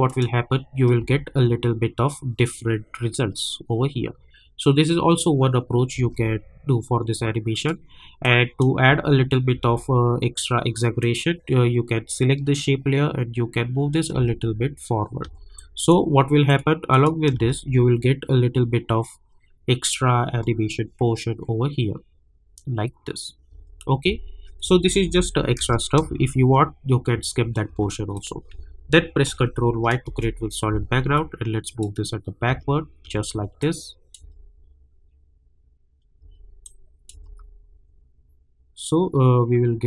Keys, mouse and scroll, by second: 1.0 space, 5.9 space, 7.5 click, 8.8 space, 11.0-14.1 drag, 14.1 space, 15.5 click, 17.3 space, 23.5 space, 24.6 -, 24.8 -, 25.0 -, 25.6 space, 28.1 click, 29.3 ctrl+y, 30.0 Return, 31.1-32.4 drag, 32.4 space, 33.6 click, 34.2 space, 36.2 space, 36.6 click, 37.1 space.